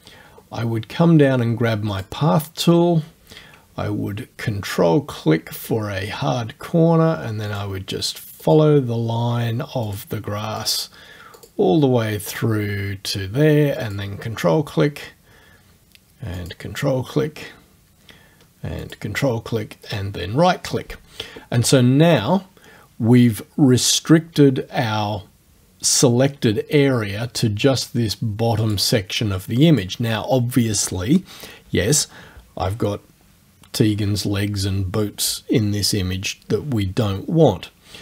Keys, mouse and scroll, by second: 0.1 scroll down 2, 1.9 click, 5.6 ctrl+click, 7.5 click, 8.5 click, 9.9 click, 10.6 click, 11.4 click, 12.3 click, 13.8 ctrl+click, 16.4 ctrl+click, 18.8 ctrl+click, 19.9 right click, 28.6 click, 29.7 click.